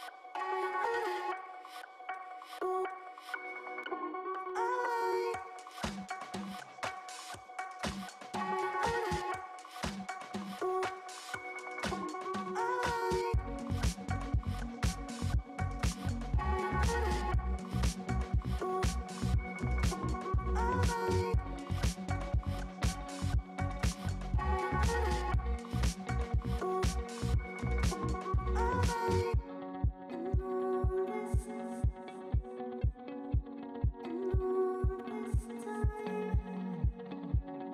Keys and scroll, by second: 0.0 ], 7.9 space.